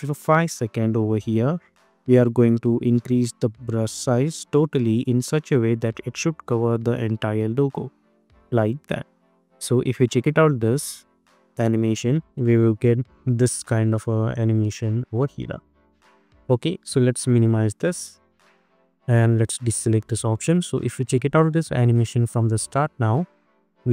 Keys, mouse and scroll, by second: 7.4 space, 9.1 click, 10.0 space, 15.0 space, 15.4 scroll up 1, 17.4 click, 20.4 click, 20.8 space.